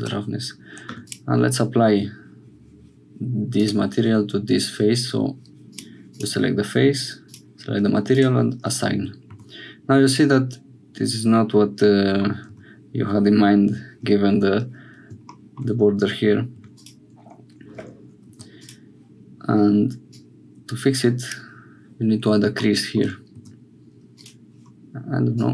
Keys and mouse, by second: 0.0 Tab, 0.8 3, 1.0 click, 3.5 click, 5.7 click, 7.2 click, 8.2-9.3 drag, 9.3 Tab, 10.4-12.2 middle drag, 12.5 Tab, 15.8 2, 16.7 click, 18.3 3, 18.6 click, 20.1-21.3 drag, 23.3 2, 24.1 click, 25.3 click.